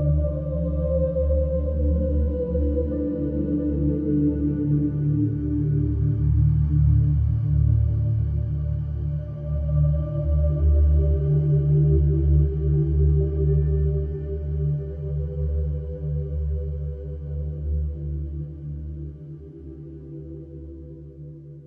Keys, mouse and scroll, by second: 0.2 click, 0.7 click, 1.1-2.9 scroll, 3.7 middle click, 3.9 middle click, 4.0 middle click, 5.8 middle click, 6.4 scroll, 6.5-7.4 middle click, 6.6 middle click, 6.6 middle click, 6.6 middle click, 7.2 middle click, 7.3 middle click, 8.0 click, 8.7 click, 9.1-9.5 scroll, 10.0-11.2 scroll, 11.3 click, 12.1 click, 12.5-13.9 scroll, 14.6 middle click, 15.1-17.2 scroll, 17.2 click, 17.7-18.2 scroll, 18.5 click, 18.9-21.6 scroll.